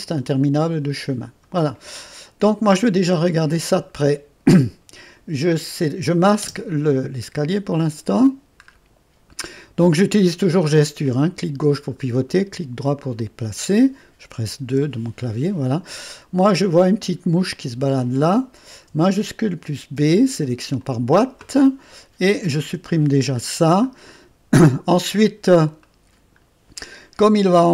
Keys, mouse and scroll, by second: 0.0-1.3 drag, 5.0 click, 6.4 space, 7.3-8.0 scroll up 1, 7.7 right click, 8.7-9.3 scroll up 1, 9.3 right click, 11.0-12.0 drag, 13.2-14.7 right drag, 14.7 space, 15.4-16.0 scroll up 1, 16.0 scroll up 1, 16.1 right click, 16.9-20.0 right drag, 16.9-17.4 scroll up 1, 20.0 shift+b, 20.8-22.1 drag, 22.7 Delete, 24.1 click, 24.9 middle click, 25.2-25.8 scroll up 1, 25.8 middle click, 26.7-27.3 right drag.